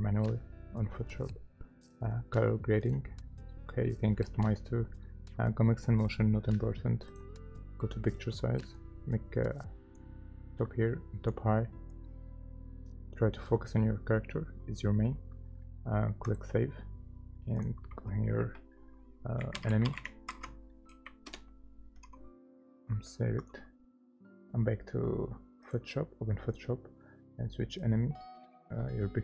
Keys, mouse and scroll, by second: 19.4-20.9 typing, 21.3 Return.